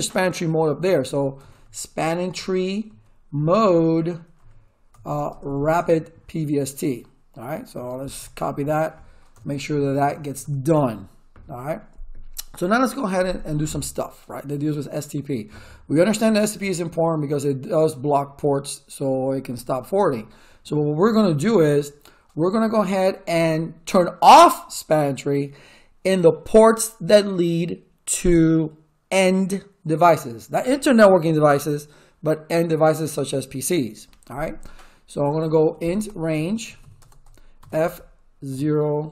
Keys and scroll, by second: 1.1-2.8 typing, 2.2 Tab, 3.4 Tab, 4.4 p, 4.9 BackSpace, 5.0 r, 5.3 Tab, 5.7 Return, 7.4-8.5 typing, 9.3 Return, 35.3-39.1 typing.